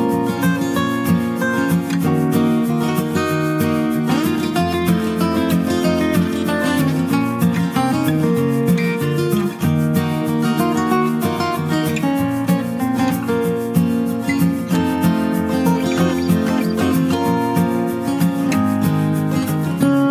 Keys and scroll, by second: 4.4-5.4 typing, 17.9 ctrl+space, 18.4 ctrl+space, 18.4 ctrl+space, 19.0 ctrl+space.